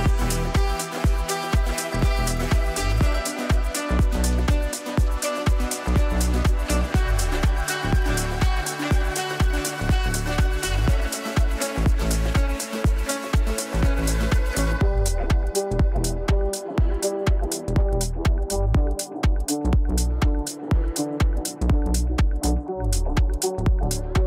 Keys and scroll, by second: 7.2 ctrl+z, 9.5 shift+Page_Down.